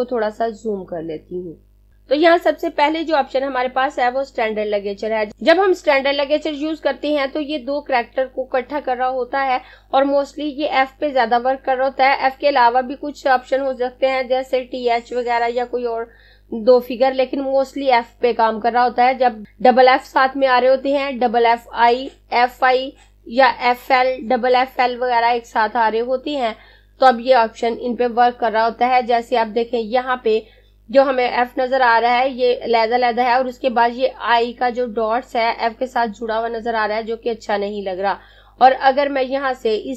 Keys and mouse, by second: 1.9 click, 39.6 click.